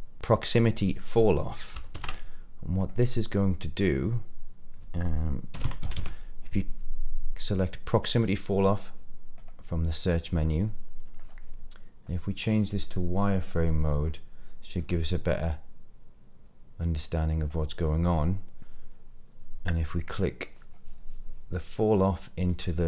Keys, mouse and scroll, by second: 2.0 shift+a, 5.9 l, 10.6 middle click, 12.0 click, 13.3 click, 14.0-14.8 middle drag, 16.7 click, 18.0 middle click, 18.8-19.7 scroll down 2, 22.0-22.8 drag.